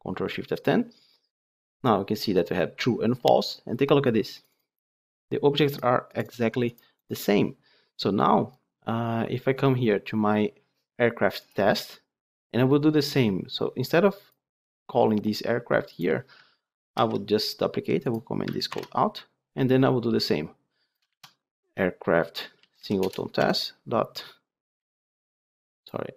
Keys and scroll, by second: 16.9 ctrl+d, 18.6 ctrl+/, 22.9 Return.